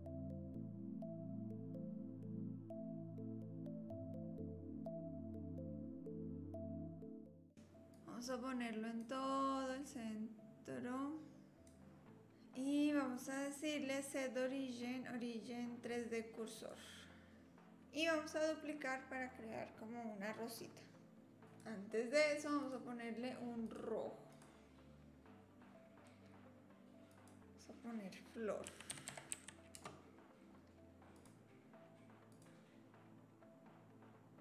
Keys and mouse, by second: 0.1 middle click, 0.8 middle click, 1.0 click, 1.4 middle click, 1.7 middle click, 2.1 middle click, 2.3 click, 2.6 a, 2.8 e, 3.1 click, 3.4 Tab, 3.5 drag, 3.8-4.2 drag, 4.7 click, 4.9 s, 5.3 s, 5.8 middle click, 6.1 r, 6.7 click, 7.0 click, 7.2 middle click, 7.4 KP_3, 8.0-9.0 drag, 9.7-11.7 drag, 13.3-16.7 drag, 21.5 click, 22.6-23.8 drag, 24.4-30.4 drag, 31.1 click.